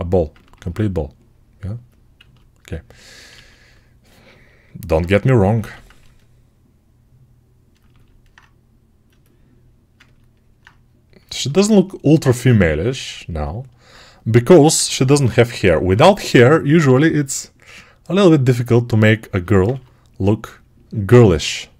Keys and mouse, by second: 9.8-12.4 ctrl+alt+right drag, 14.6 1, 15.1 [, 15.6 [, 19.6 2.